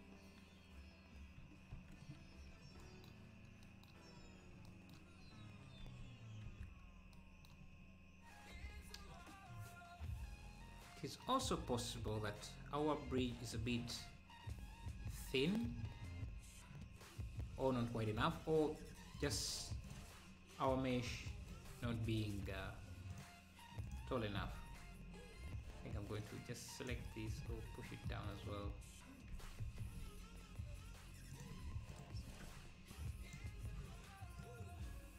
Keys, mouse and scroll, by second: 1.8 ctrl+s, 2.1 scroll down 2, 3.5 scroll down 1, 4.2 click, 5.3-5.8 scroll down 1, 5.9 ctrl+s, 6.5 ctrl+s, 9.1 scroll down 2, 13.1-14.0 scroll down 5, 13.6 click, 15.8-16.2 scroll up 3, 17.1-17.5 scroll up 1, 19.2 click, 19.9 shift+click, 20.8 KP_1, 21.9-22.3 scroll up 5, 23.2 click, 23.9 click, 24.6 z, 25.2 scroll down 2, 25.5 Tab, 26.4 click, 27.3 scroll down 1, 27.4 Tab, 27.9 scroll down 1, 29.3 g, 31.9 shift+click, 32.5 Tab, 32.9-35.1 drag.